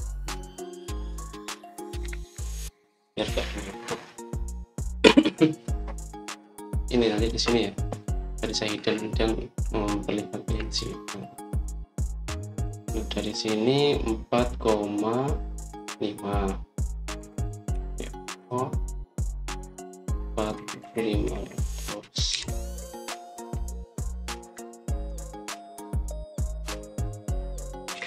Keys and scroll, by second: 0.1-0.6 typing, 2.9-3.2 typing, 18.1-18.6 typing, 21.4-24.2 typing, 24.3 Return, 25.3 Escape, 26.0 Escape, 26.6-27.3 typing.